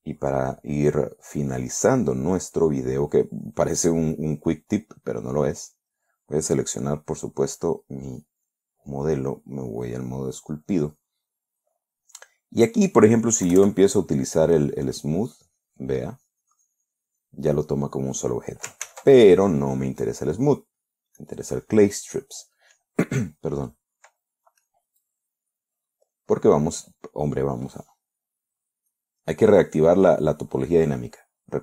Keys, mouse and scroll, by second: 1.2 scroll down 1, 1.4 scroll up 1, 2.0 scroll down 2, 2.9 right click, 4.5 click, 5.2 click, 7.2 right click, 9.0 click, 10.2 click, 12.6-13.6 middle drag, 14.0 KP_Add, 15.0-18.6 drag, 19.3 ctrl+z, 20.5 click, 21.6 click, 22.1 right click, 25.1-26.2 middle drag, 29.2 click.